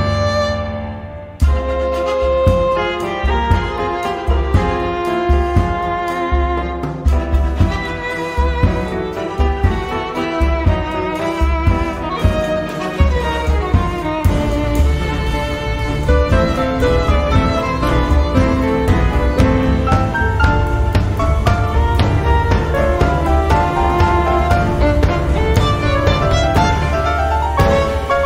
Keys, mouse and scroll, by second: 4.3 scroll down 2, 4.9-6.1 drag, 6.7-9.9 drag, 10.3-11.5 drag, 11.9 click, 14.3-17.4 drag, 17.5 click, 19.3 click, 20.5-23.9 drag, 24.4-25.4 drag, 27.0 click.